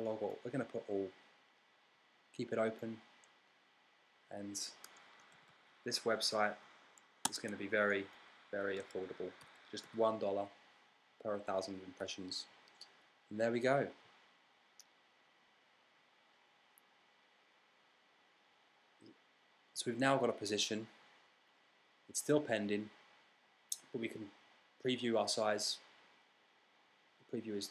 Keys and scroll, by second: 5.4-7.8 typing, 9.3-11.9 typing.